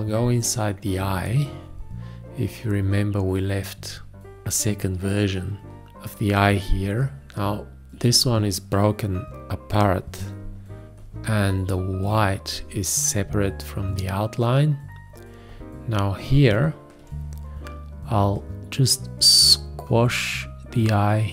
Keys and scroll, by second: 9.7 7, 17.0 q.